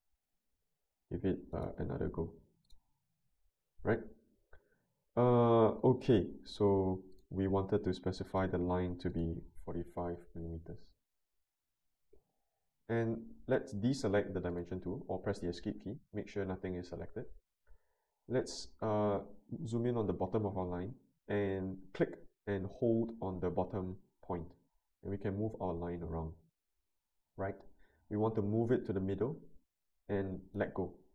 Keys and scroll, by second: 3.2 Escape, 9.5-10.4 typing, 15.1 Escape.